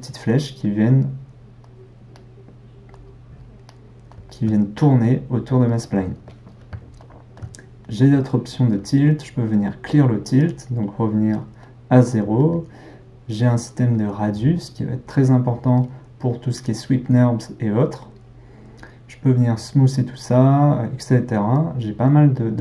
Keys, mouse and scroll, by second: 7.9-11.6 right drag, 11.6-12.4 middle drag, 12.4-22.6 right drag.